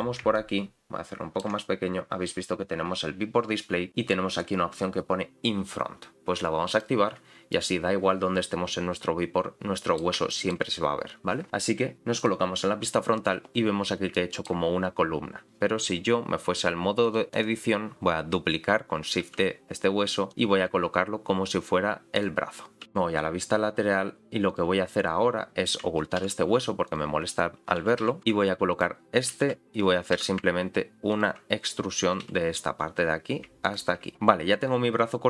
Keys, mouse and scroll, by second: 0.3-1.5 ctrl+middle drag, 2.1-3.3 scroll down 1, 3.3-4.4 scroll down 1, 6.7 click, 7.5-10.0 middle drag, 10.3 shift+middle click, 12.2 click, 12.8-14.1 scroll up 1, 14.1 scroll up 1, 14.1 shift+middle click, 17.0 click, 19.2 shift+d, 20.6 r, 22.8 s, 22.8 g, 22.8 r, 22.8 click, 24.5 click, 26.2 h, 26.8 click, 27.8 g, 28.7 click, 29.2 g, 32.2 e, 34.1 click, 34.1 shift+middle click, 34.1-34.6 scroll up 3, 34.6-35.2 scroll down 1.